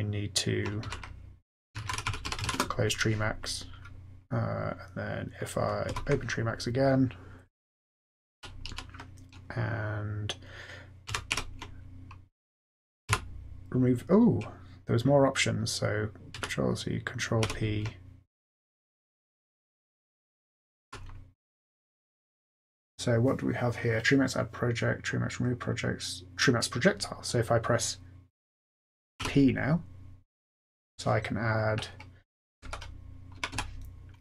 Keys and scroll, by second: 0.6-2.9 typing, 5.9 F8, 8.3 Down, 8.6 Down, 11.0 ctrl+c, 11.3 ctrl+p, 13.1 d, 16.3 ctrl+c, 17.4 ctrl+p, 20.6-21.4 typing, 29.2 p, 32.3-33.5 typing.